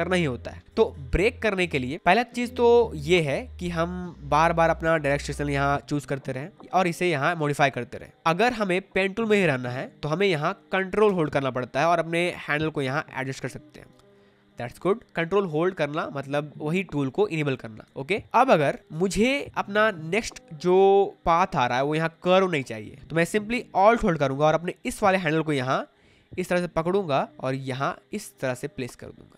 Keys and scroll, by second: 0.8 space, 10.2 space, 14.8 ctrl+z, 18.9 space.